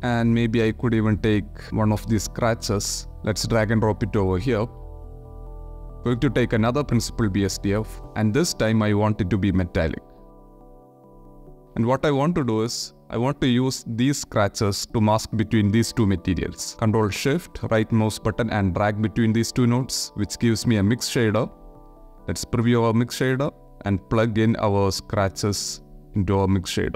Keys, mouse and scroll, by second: 2.1 alt+right click, 3.2 click, 3.8 click, 4.7 click, 5.2 click, 5.9 shift+d, 6.9 ctrl+shift+click, 7.5 click, 8.8 click, 9.3-10.6 middle drag, 10.6 click, 10.8 click, 12.2 ctrl+shift+click, 13.3 click, 14.4 click, 16.0 click, 18.1 ctrl+shift+click, 19.8 click, 21.2 click, 21.8 ctrl+shift+click, 23.4-25.2 drag, 25.8 click.